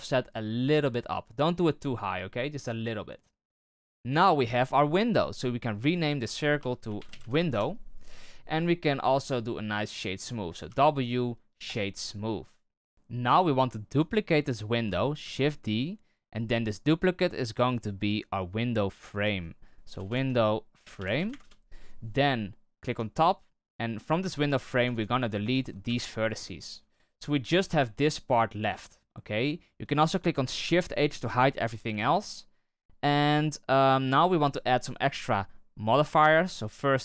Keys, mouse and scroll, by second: 1.6-3.9 middle drag, 3.9-4.4 scroll down 2, 4.4-5.1 middle drag, 5.1-5.9 scroll down 2, 5.9-8.5 drag, 8.5 middle click, 9.0-10.6 scroll up 3, 10.6 w, 12.2 scroll down 1, 12.8 scroll down 3, 13.9 right click, 15.2 shift+d, 17.5 click, 17.7-20.0 drag, 20.0 BackSpace, 22.8 Tab, 23.6 right click, 24.6 ctrl+KP_Add, 24.8 ctrl+KP_Add, 24.9 ctrl+KP_Add, 25.1 ctrl+KP_Add, 25.4 ctrl+KP_Add, 25.8 x, 26.8 Tab, 27.7-28.6 right drag, 30.6 shift+h, 36.1-37.0 drag.